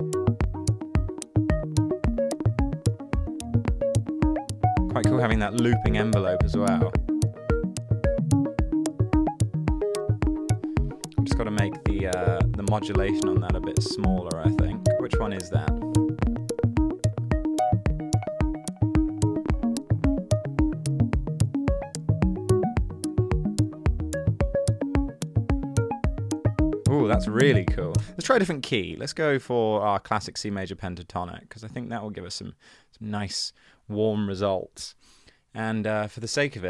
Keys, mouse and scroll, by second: 28.7 super+click, 30.8 super+click.